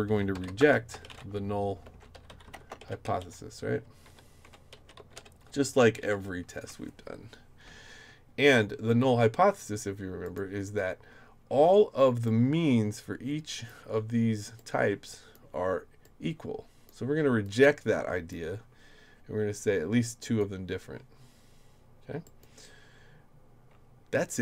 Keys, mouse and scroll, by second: 0.0-6.5 typing, 6.5 Return, 10.2 click, 12.2-13.7 drag, 14.6 click, 16.0 click, 17.4 click, 20.2 click, 22.2 click.